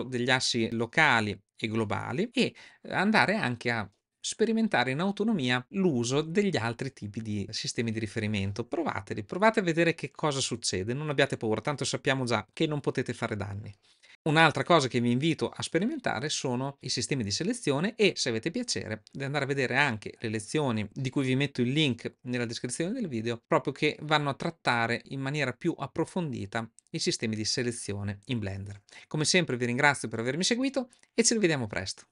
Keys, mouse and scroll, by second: 2.2-31.8 drag.